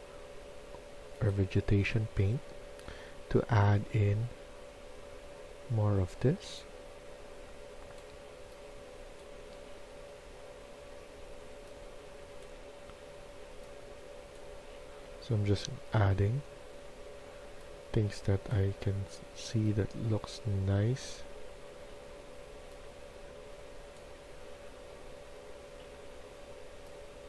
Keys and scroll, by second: 24.1 typing.